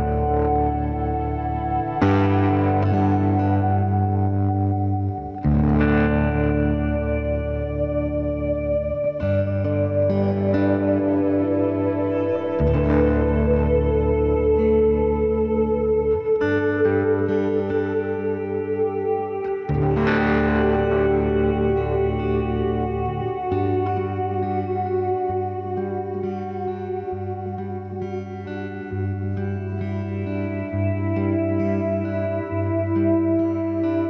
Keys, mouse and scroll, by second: 1.3 KP_3, 1.5 Tab, 2.6 z, 3.3 Tab, 5.4-7.3 drag, 6.0 c, 13.9 i, 14.6 z, 14.8-15.8 middle drag, 15.8 right click, 16.7 click, 17.6 ctrl+b, 19.2 KP_3, 19.4 Tab, 20.6 z, 22.0 ctrl+s, 24.0 z, 24.1-26.9 middle drag, 26.2 KP_3, 26.5 z, 27.1 Tab, 30.8 ctrl+Tab, 33.6-34.0 right drag.